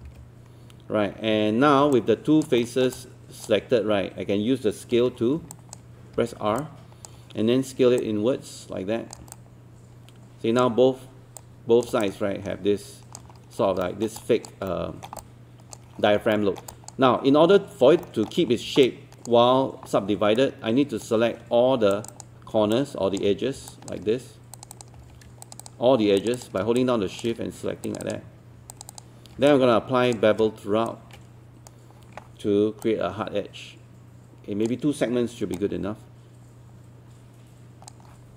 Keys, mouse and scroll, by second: 0.0 ctrl+e, 2.0 alt+click, 2.6 alt+middle click, 3.0 alt+click, 5.0 w, 5.5 alt+click, 6.6 alt+click, 8.0 click, 9.4 alt+click, 11.4 click, 12.0-13.3 alt+drag, 13.3 scroll up 1, 13.8 alt+middle click, 14.2 alt+click, 14.7 alt+middle click, 15.2 alt+click, 16.4 alt+middle click, 16.7 alt+click, 18.0 alt+middle click, 18.9 alt+click, 20.4 right click, 21.9 click, 22.8 alt+click, 23.7 alt+click, 24.6 shift+click, 25.4 shift+click, 26.4 shift+click, 26.8 alt+click, 27.8 shift+click, 28.0 shift+click, 28.7 shift+click, 28.9 shift+click, 29.5 alt+click, 30.9-32.3 shift+right drag, 32.8-38.3 drag.